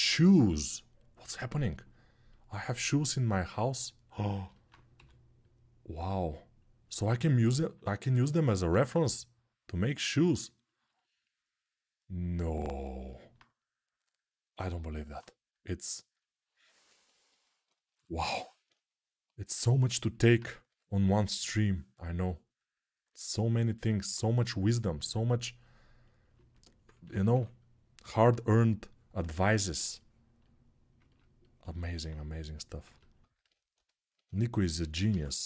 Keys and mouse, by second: 4.7 g, 16.8 3, 20.4 g, 27.1 3, 30.1-33.3 alt+right drag, 33.3-34.6 alt+middle drag, 35.1-35.4 middle drag.